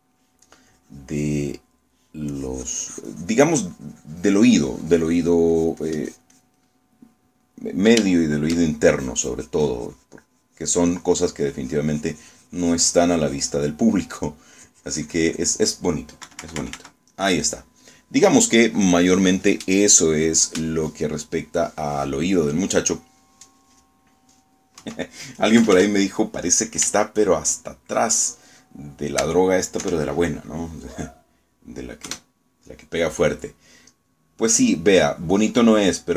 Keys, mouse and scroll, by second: 0.8 middle click, 1.8 click, 2.6 middle click, 3.4-7.7 drag, 8.2 middle click, 9.2 shift+click, 10.0-14.8 shift+drag, 15.6-16.7 drag, 17.4 KP_Subtract, 18.2 middle click, 18.8-20.2 drag, 20.9-24.2 drag, 24.4-25.4 drag, 25.9 KP_1, 26.7 KP_Add, 27.5 scroll down 2, 28.2 shift+click, 29.0 shift+middle click, 29.8 shift+middle click, 30.9 KP_1, 33.2 KP_Add, 35.2-36.1 middle drag.